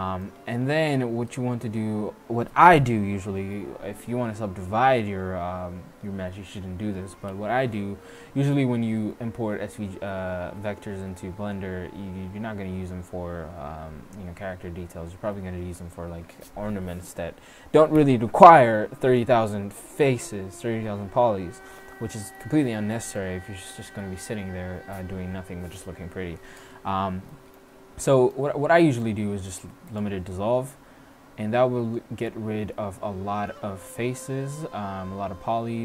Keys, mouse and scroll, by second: 7.6 x, 27.0 middle click, 27.1 click, 27.6 middle click, 29.2 x.